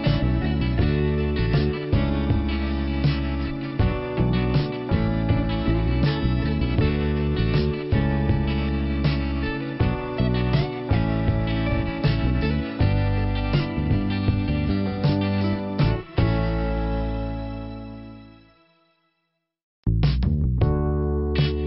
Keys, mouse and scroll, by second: 0.8 click, 3.1 click, 3.3 click, 4.4 click, 5.8 click, 8.7 click, 8.8 click, 9.1 click, 9.2 double click, 9.5 double click, 10.8 click, 11.2 click, 11.5 click, 11.5 double click, 12.8 double click, 14.2 click.